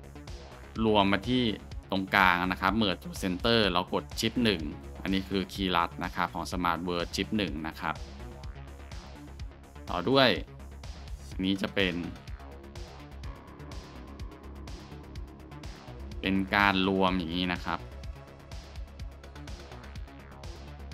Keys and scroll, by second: 4.4 shift+1, 8.2 ctrl+z, 10.4 Tab.